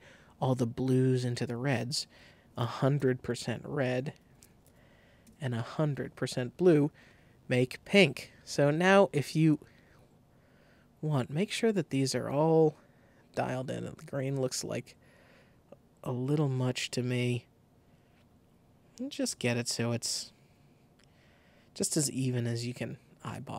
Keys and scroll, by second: 1.9 super+a, 2.3 super+2, 2.7 5, 3.3 Tab, 4.0-4.9 typing, 5.2 Return.